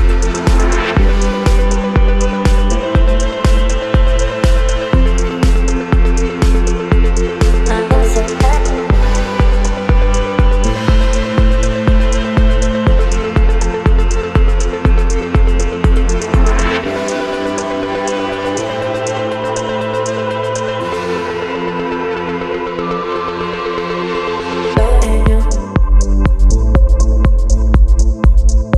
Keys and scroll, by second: 3.7 space, 10.3 b, 11.1 ], 16.6 v, 17.4 ctrl+t, 28.6 Return.